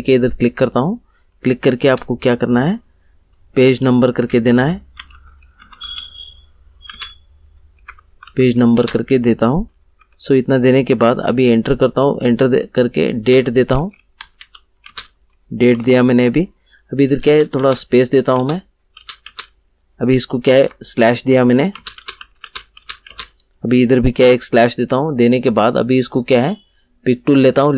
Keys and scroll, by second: 4.7-8.7 typing, 9.9 shift+;, 11.1 Return, 13.0-14.8 typing, 16.0 shift+;, 17.2 space, 20.5 /, 21.7 space, 24.1 /.